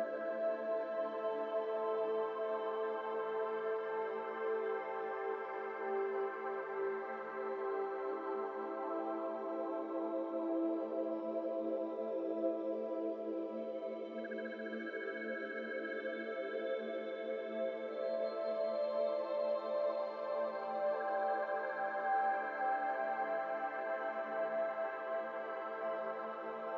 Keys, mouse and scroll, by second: 1.4 e, 2.3 Tab, 2.7-3.1 scroll up 1, 3.1-3.5 scroll down 2, 3.5 Tab, 3.9 2, 4.2 alt+z, 4.7 1, 4.9 click, 5.6 KP_Decimal, 6.2 2, 6.5 alt+z, 6.7-7.4 scroll down 6, 6.8 middle click, 7.4 alt+z, 7.9 alt+click, 8.4 scroll down 2, 8.6 alt+z, 8.8 shift+middle click, 9.5 ctrl+b, 11.7 alt+shift+click, 12.5 ctrl+b, 13.6 Tab, 13.7 middle click, 14.0-14.3 scroll down 7, 14.3 middle click, 14.5 scroll up 5, 14.7 Tab, 14.9 shift+middle click, 15.2 3, 15.4 click, 15.8 shift+click, 16.2 click, 16.9 shift+click, 17.2 shift+click, 17.5 shift+click, 17.9 shift+click, 18.1 shift+click, 18.6 shift+click, 19.1 alt+z, 19.2 middle click, 19.4 scroll up 1, 19.5 middle click, 20.3 scroll up 2, 20.6 shift+middle click, 21.0 1, 21.1 middle click, 21.9 scroll down 1, 22.0-23.5 middle drag, 23.5 ctrl+KP_Add, 23.6 ctrl+KP_Add, 24.3 ctrl+KP_Add, 25.0 ctrl+z, 25.8 ctrl+shift+z.